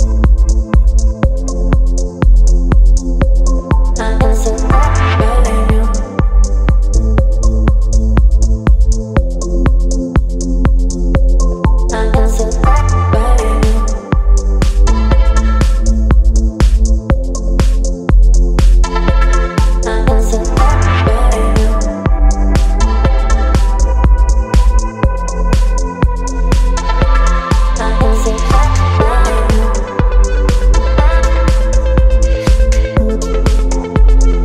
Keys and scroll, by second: 0.1 Delete, 0.8 Delete, 4.0 space, 5.7 ctrl+d, 8.3 v, 12.4 Delete, 13.3 Delete, 15.3 v, 16.9 space, 19.4 Left, 19.4 Left, 20.2 Left, 20.8 Left, 33.7 BackSpace.